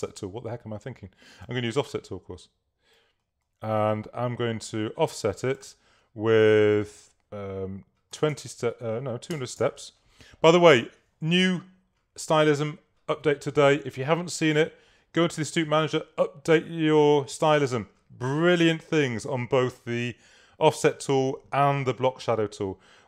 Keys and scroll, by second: 0.0 o, 8.4 0, 9.6 Tab.